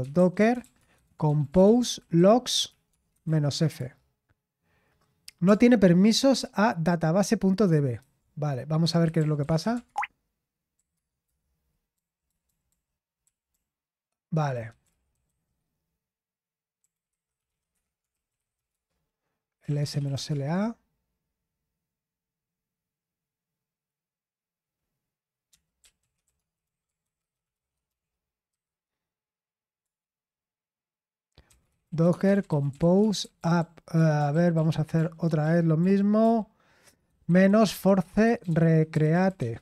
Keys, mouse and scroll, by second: 0.6-3.7 typing, 3.7 Return, 7.9 ctrl+c, 8.2-11.2 typing, 12.2-15.2 typing, 16.5-20.7 typing, 26.2-28.5 typing, 29.8 Return, 31.2-39.6 typing, 34.3 ctrl+p, 34.5 ctrl+p.